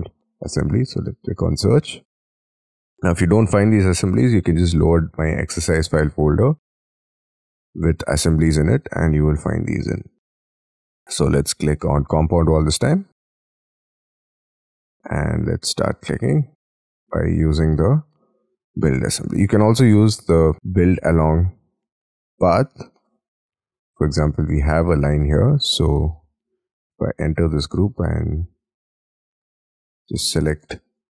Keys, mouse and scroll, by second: 6.5 double click, 13.3-14.0 scroll down 9, 14.0-15.8 scroll up 20, 16.2 middle click, 16.8-17.3 scroll down 11, 19.3-20.0 scroll down 7, 20.0-20.5 scroll up 10, 23.0 middle click, 24.0-24.4 scroll down 5, 24.4 scroll up 5, 24.7-25.4 scroll down 6, 25.4-26.1 scroll up 3, 26.9 double click, 27.3 double click, 28.8-29.8 scroll down 5, 29.8 double click, 30.3-30.7 scroll up 4, 30.9 ctrl+shift+click.